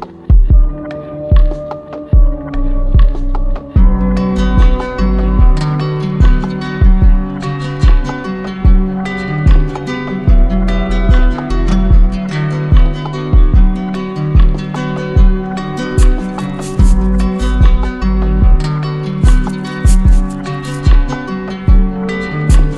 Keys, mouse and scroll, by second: 0.6-1.6 drag, 5.3-6.4 drag, 8.1 click, 10.1 alt+click, 10.3 ctrl+z, 12.7 alt+click, 14.4 alt+click, 14.5 ctrl+z, 16.0 alt+click, 16.2 ctrl+z, 18.4-19.8 alt+drag, 20.5 alt+click, 21.9 alt+click, 22.1 ctrl+z.